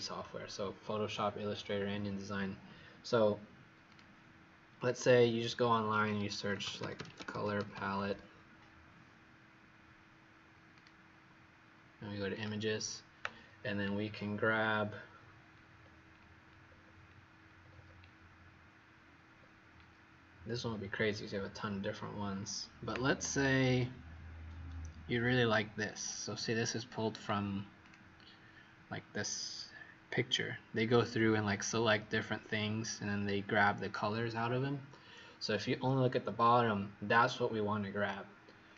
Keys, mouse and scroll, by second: 3.9 click, 6.2-8.7 typing, 10.7 click, 14.0-14.5 scroll down 2, 15.7 scroll down 1, 16.8 scroll down 1, 17.5-17.9 scroll down 4, 19.3 scroll down 1, 22.0 scroll down 2, 26.1-26.6 scroll down 2, 27.8 click.